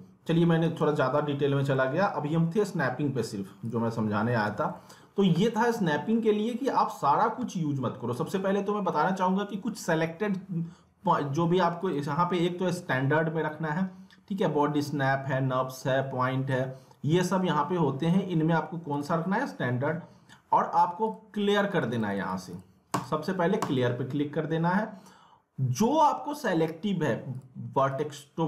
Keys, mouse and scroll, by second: 0.6 click, 1.4-1.7 scroll up 1, 1.7 middle click, 2.2-2.5 scroll up 1, 2.6 alt+middle click, 3.5-4.9 typing, 3.6 click, 4.7 alt+middle click, 5.1 scroll down 1, 5.3 alt+middle click, 5.9 alt+middle click, 11.8 click, 18.9 click, 21.1 click, 27.3 click.